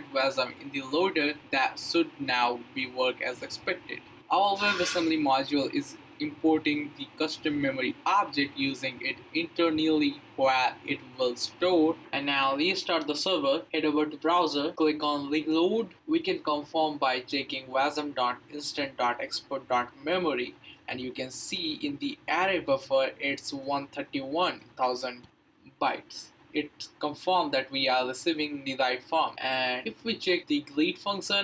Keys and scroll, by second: 10.0-11.3 typing, 13.1 ctrl+c, 13.3 Up, 13.5 Return, 15.7 Return, 17.5 Up, 18.8 Return, 29.9 Up, 30.8 Up.